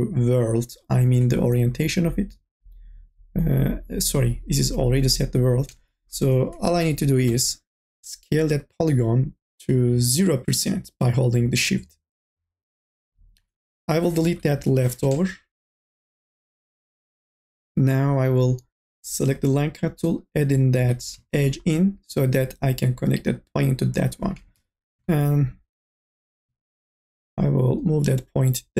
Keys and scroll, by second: 7.2 t, 14.5 Delete, 20.8 e, 24.4 1.